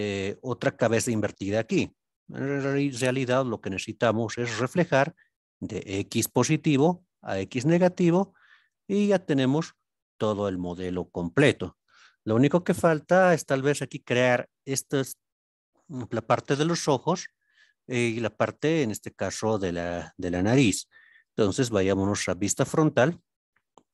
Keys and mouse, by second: 8.7 alt+z, 9.3-11.6 middle drag, 21.7 KP_1.